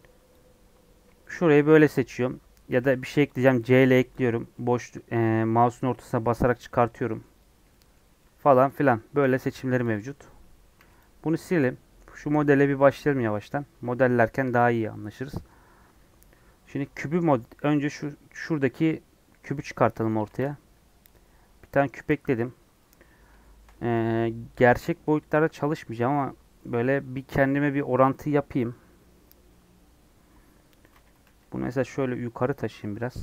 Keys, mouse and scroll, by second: 0.3 click, 1.2-3.2 shift+middle drag, 3.2 c, 7.6-9.1 middle drag, 9.1 KP_1, 10.0 Tab, 10.9 x, 21.0 shift+a, 22.0 s, 23.3-25.3 shift+middle drag, 25.3 s, 32.8 scroll down 2, 33.0 shift+middle click.